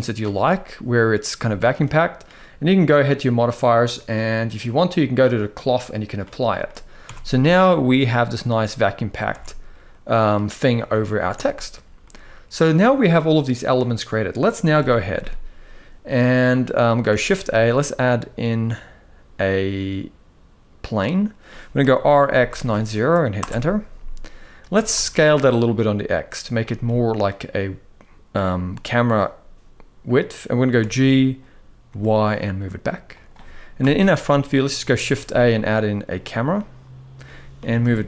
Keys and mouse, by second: 0.1-0.9 middle drag, 1.4-1.9 middle drag, 5.2-5.8 drag, 6.3 middle click, 6.7 Tab, 7.1 middle click, 8.1 click, 8.5 middle click, 9.1 alt+a, 9.6 middle click, 10.6 middle click, 11.1 Tab, 11.7-12.3 middle drag, 14.5 KP_1, 16.8 shift+a, 21.5 r, 24.4 s, 26.5-26.9 middle drag, 30.5 g, 33.5 KP_1, 34.7 shift+a, 36.2-36.9 middle drag, 37.3 g.